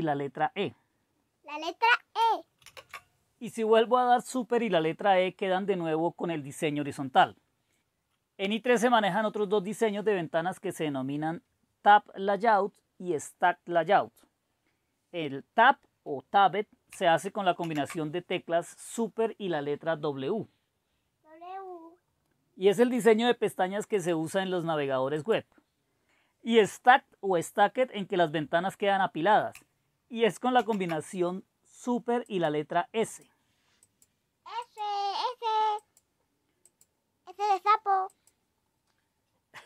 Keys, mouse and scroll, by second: 2.6 super+e, 17.6 super+w, 22.9 click, 23.8-27.2 drag, 30.6 super+s, 32.3-34.7 drag, 34.9 click, 36.0-37.9 drag, 38.1-39.5 drag.